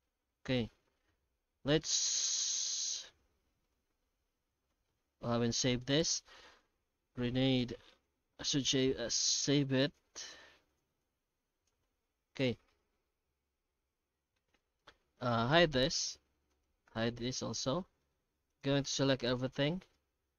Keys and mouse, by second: 0.8-1.6 middle drag, 2.4 alt+h, 3.0 alt+a, 3.9 ctrl+s, 13.1-14.3 middle drag, 15.2 right click, 15.5 h, 16.5 right click, 16.9 h, 17.4-18.0 middle drag, 18.5 right click, 19.1 shift+g, 19.9 alt+shift+z, 20.2 alt+shift+z.